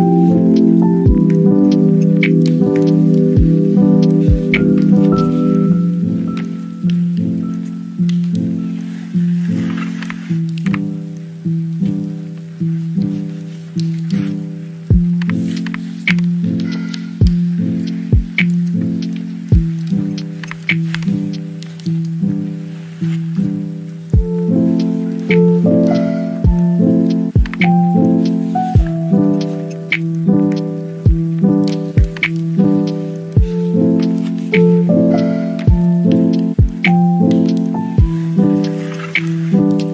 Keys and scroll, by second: 10.1 ., 15.2-16.0 typing, 20.4 1, 27.5 3, 32.1 3.